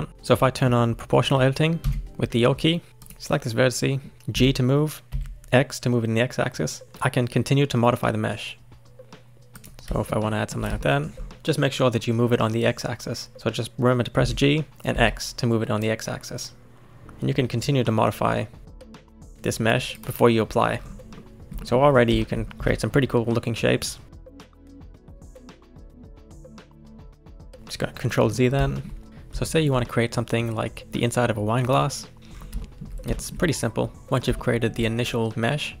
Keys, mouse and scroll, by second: 0.4-1.8 middle drag, 1.8 o, 2.9 middle click, 3.0 click, 3.8 middle click, 4.3 g, 10.0-11.3 shift+middle drag, 14.2 g, 20.7-21.2 scroll down 4, 21.2 shift+middle click, 21.7-22.2 scroll up 3, 22.2 shift+middle click, 22.5 click, 22.6 g, 26.0 scroll down 2, 26.2 middle click, 26.3 ctrl+z, 26.4 ctrl+z, 26.6 ctrl+z, 26.7 ctrl+z, 26.9 ctrl+z, 27.5 middle click, 27.7-28.1 scroll up 1, 28.1 middle click, 28.4 scroll down 1, 28.7-32.2 shift+middle drag, 32.2-32.6 scroll up 6, 32.6-34.0 shift+middle drag, 34.4-35.8 shift+middle drag.